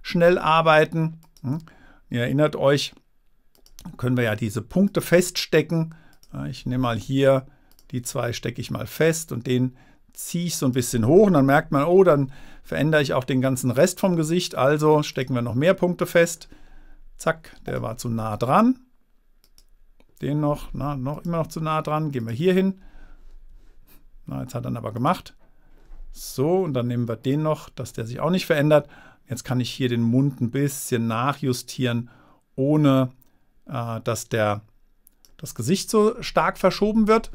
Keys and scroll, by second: 20.9 Return, 23.8 Return.